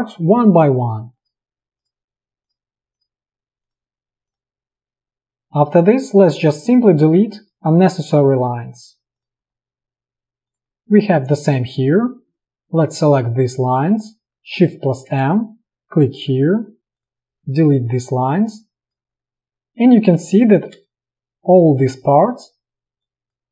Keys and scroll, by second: 5.2 Delete, 14.6 shift+m, 16.4 v, 17.1 Delete, 20.1 ctrl+z, 20.9 space.